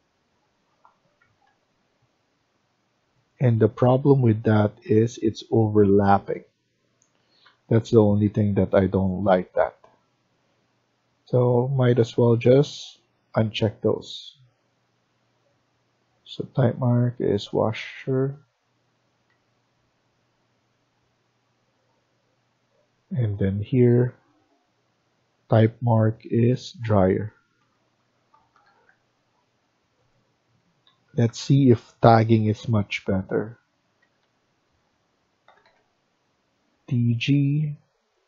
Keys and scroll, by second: 1.2 Escape, 1.4 Escape, 3.8 Escape, 3.9 Escape, 7.3 Escape, 8.0 Escape, 8.1 Escape, 19.2 Escape, 27.3-29.1 typing, 30.8 Escape, 31.0 Escape, 31.1 Escape, 31.7-32.5 typing, 33.8 Escape, 34.1 Escape, 35.2-35.9 typing.